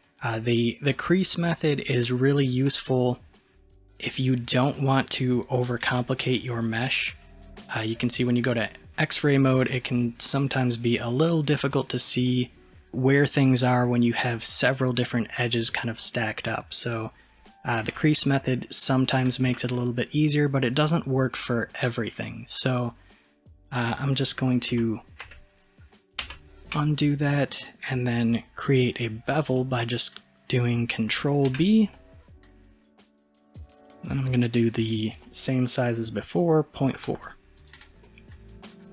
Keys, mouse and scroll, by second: 1.1-2.1 scroll up 1, 2.1-5.9 shift+middle drag, 5.9 alt+z, 6.3-9.4 middle drag, 11.7-12.5 middle drag, 12.5-12.9 scroll up 2, 12.9-17.9 middle drag, 17.9 alt+z, 18.3-19.3 scroll down 3, 19.3-22.6 shift+middle drag, 22.6 click, 23.9-24.8 middle drag, 24.8 ctrl+z, 25.3 ctrl+z, 26.3 ctrl+z, 27.2-30.3 middle drag, 31.6 ctrl+b, 38.1-38.9 middle drag.